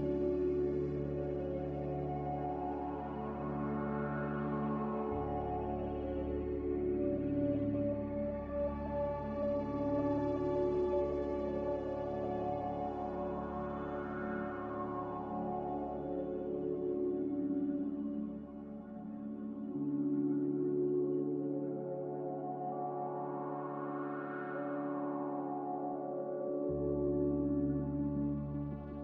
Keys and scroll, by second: 3.1 ctrl+w, 19.8 q, 23.7 q, 27.9 q.